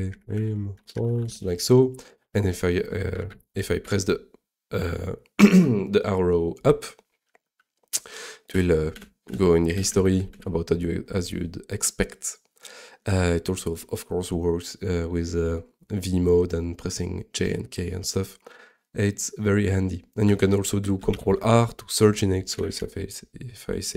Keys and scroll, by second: 4.0 Up, 8.9 Up, 9.3 Up, 9.7 Down, 9.9 Down, 10.0 Down, 21.1 ctrl+r, 22.3-23.2 typing.